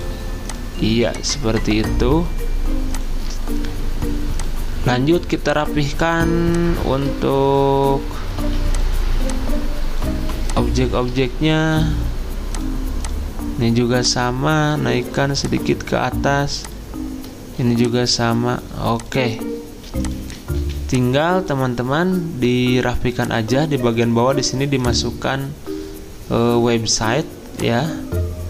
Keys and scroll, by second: 8.4 ctrl+z, 20.6 z.